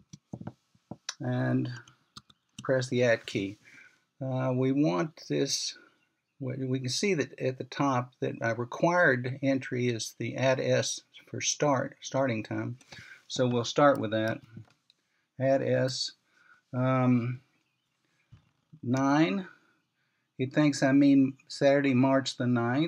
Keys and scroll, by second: 0.0-1.2 typing, 3.5-4.2 typing, 15.7 typing, 20.5-21.2 typing.